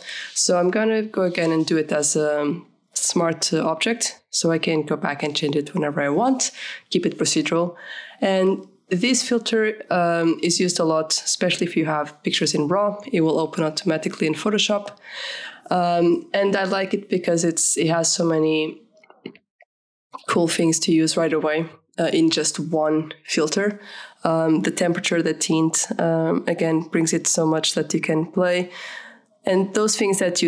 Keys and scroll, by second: 0.0-0.4 typing, 1.4 Return.